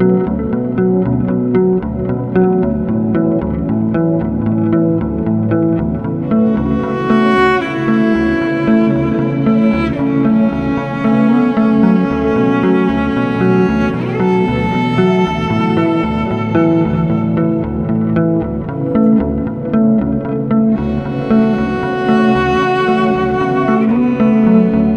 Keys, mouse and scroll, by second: 0.7 click, 1.5 8, 3.2 click, 5.0 click, 6.0 click, 7.0 click, 8.2 click, 10.6 click, 11.7 click, 12.4 click, 13.6 click, 13.9 click, 14.8 click, 15.8 click, 17.3 click, 20.1 click, 22.2 click, 24.6 click.